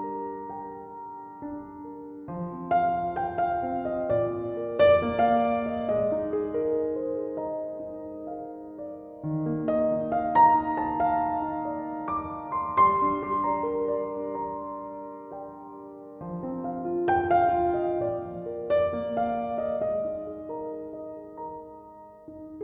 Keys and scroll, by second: 16.2 ctrl+z, 16.3 ctrl+z, 16.5 ctrl+z, 16.8 ctrl+z, 17.2 ctrl+z, 17.4 ctrl+z, 19.2 ctrl+z.